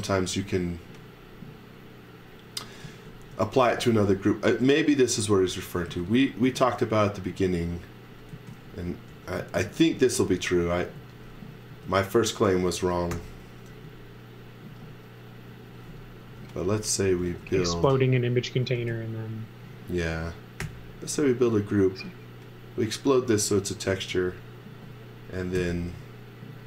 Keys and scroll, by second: 0.0 x, 2.6-4.6 typing, 6.0 z, 6.4 space, 8.1-9.6 typing, 11.0 x, 11.7 space, 13.1 u, 13.7 e, 14.7-18.8 typing, 20.6 g, 25.5 n.